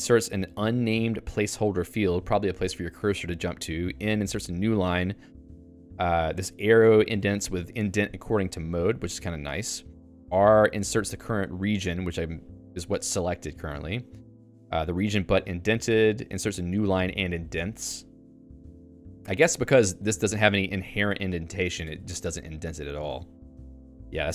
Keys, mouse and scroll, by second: 18.8 Up, 19.8-22.6 typing, 23.5 Home, 23.7 Tab, 23.9 Tab.